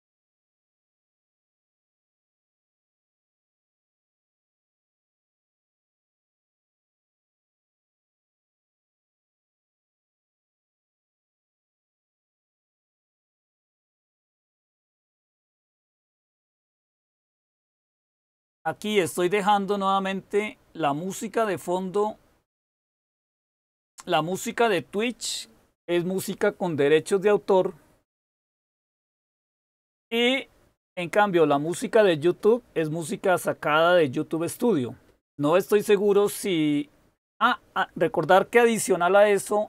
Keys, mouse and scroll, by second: 21.5-39.6 drag.